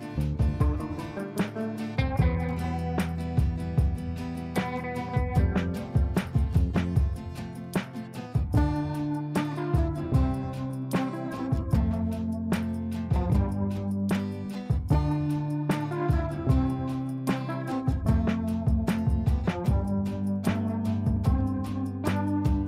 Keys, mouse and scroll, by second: 0.8 shift+click, 1.1 right click, 2.3 click, 4.3 F2, 4.6-7.6 drag, 7.6 click, 9.3-10.6 right drag, 10.6 click, 11.6 ctrl+a, 14.6 shift+f, 14.9 shift+u, 16.2-18.2 typing, 20.7-22.6 typing.